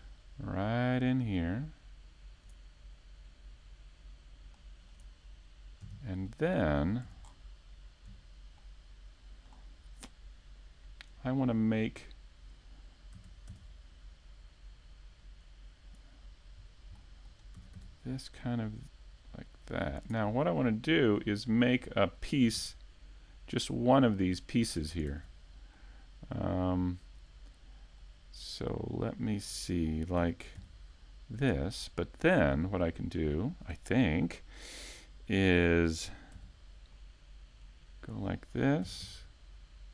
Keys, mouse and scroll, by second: 2.7 click, 3.3 shift+middle click, 4.0 shift+middle click, 4.4-5.2 scroll up 1, 5.8 right click, 6.1 Tab, 7.0 Tab, 7.4 right click, 7.8 Tab, 8.2 middle click, 8.9 Tab, 10.1 Tab, 14.0 shift+middle click, 14.8 scroll down 2, 15.1 shift+middle click, 15.8 scroll up 1, 16.2 shift+middle click, 20.7 click, 21.0 scroll down 2, 21.2 a, 21.7 middle click, 22.8 scroll down 1, 23.1 shift+middle click, 24.2 middle click, 25.2 shift+middle click, 25.7 scroll up 1, 25.9 shift+middle click, 26.3 middle click, 27.2 shift+middle click, 27.2 s, 27.8-28.1 scroll up 2, 28.1 scroll down 2, 28.3 middle click, 28.8-29.3 scroll up 2, 29.5 Tab, 30.3 middle click, 32.7 click, 35.8 scroll down 1, 36.1 a, 36.2 Tab, 36.6 middle click, 39.1 scroll down 2.